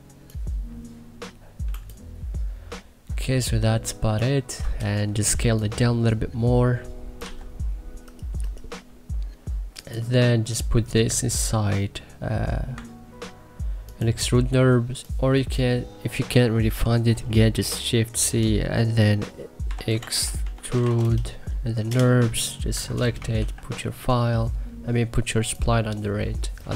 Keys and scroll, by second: 1.6 2, 5.2 t, 7.2 e, 15.0 1, 18.1 shift+c, 19.4-21.3 typing, 21.8 Return, 22.6 Escape, 23.3 ctrl+z.